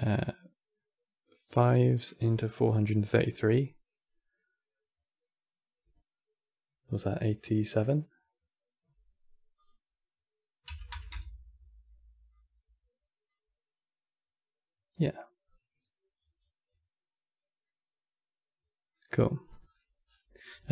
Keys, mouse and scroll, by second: 9.2-15.0 drag, 15.1 scroll up 2, 15.8 scroll up 1, 17.0 scroll down 1, 17.3-19.2 middle drag, 19.2-20.1 scroll down 12.